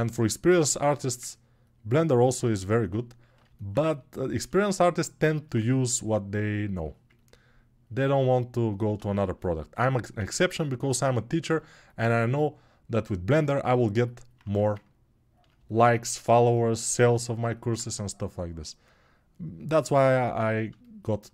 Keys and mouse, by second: 10.2 ctrl+s, 11.4-21.3 alt+drag, 14.2 1.